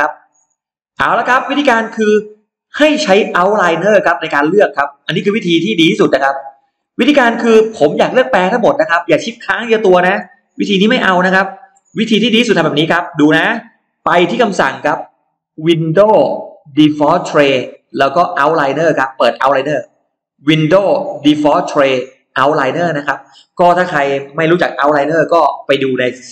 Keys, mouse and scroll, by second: 0.8 scroll down 1, 1.2-1.5 scroll up 1, 2.2 middle click, 3.6 click, 5.0 click, 5.6 middle click, 6.2-6.5 scroll down 1, 6.6 scroll up 1, 7.5-7.8 scroll up 1, 7.6 middle click, 8.1-8.4 scroll down 2, 9.6 click, 10.6 shift+click, 11.2 shift+click, 12.2 click, 15.4 click, 18.8 click, 20.1 click, 22.5 click.